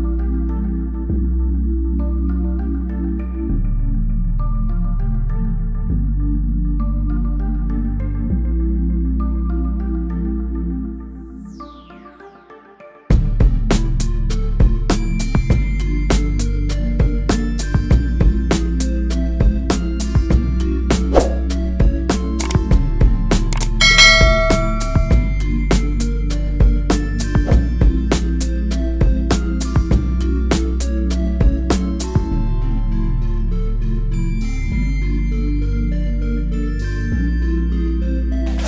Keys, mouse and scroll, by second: 2.6 click, 3.8 shift+a, 4.7 click, 5.9 shift+z, 7.7 click, 9.2 click, 9.4 click, 12.0 click, 13.4 space, 16.6 space, 18.0 ctrl+m, 19.0 click, 22.6 click, 30.5 click, 31.2 ctrl+m, 31.6-31.9 scroll down 1.